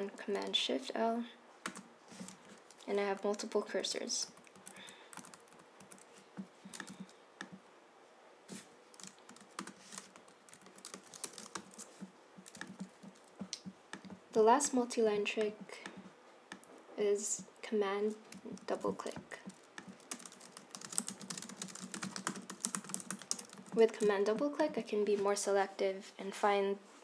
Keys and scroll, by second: 1.8 shift+super+l, 3.2 Left, 3.9 Right, 4.4 Left, 4.7 Right, 4.9 Right, 5.3 Left, 5.6 Left, 5.9 Right, 9.7 shift+super+l, 10.3 Left, 10.6 Right, 10.8 Right, 11.0 Right, 11.3 BackSpace, 11.6 shift+y, 18.7 super+c, 20.2 Return, 20.3-23.7 typing, 23.7 super+v.